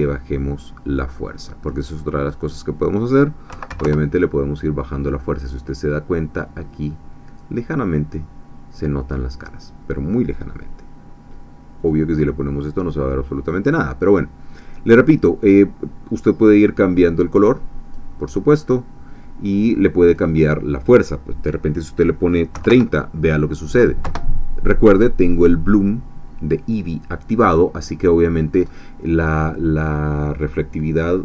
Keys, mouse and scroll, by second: 0.9-2.5 drag, 3.5 ., 3.7 1, 3.8 Return, 5.7-10.3 middle drag, 11.8 click, 12.4-13.7 middle drag, 14.5 click, 15.1 click, 16.8-18.1 drag, 20.0-22.5 drag, 22.5 3, 22.7 0, 23.0 KP_0, 24.0 Return, 27.5-27.8 scroll down 2, 28.0-28.4 scroll down 2, 28.6-29.0 scroll up 2.